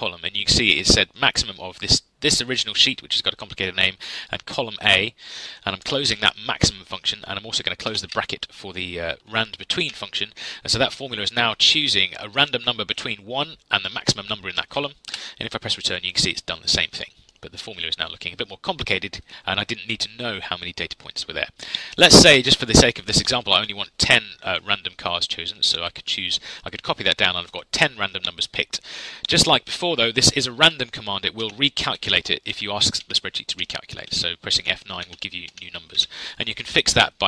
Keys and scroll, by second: 5.8 shift+0, 8.0 shift+0, 9.8 Delete, 15.0 Return, 31.4 F9.